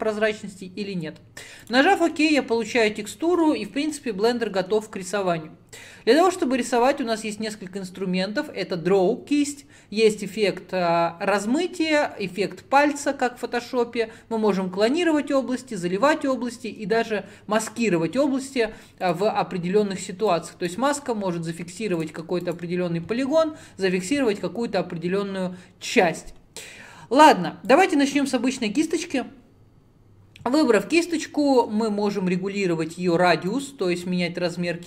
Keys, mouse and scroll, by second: 19.2-22.1 drag, 27.8-31.7 drag, 33.6-34.8 drag.